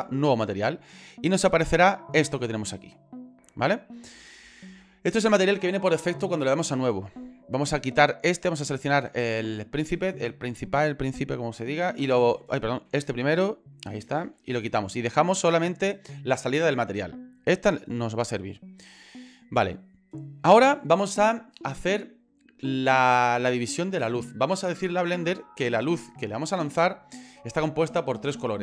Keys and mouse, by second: 1.4 shift+middle click, 2.4 ctrl+middle click, 3.7 shift+middle click, 7.6 middle click, 12.0 Delete, 12.9 ctrl+z, 14.3 Delete, 17.4-20.2 drag.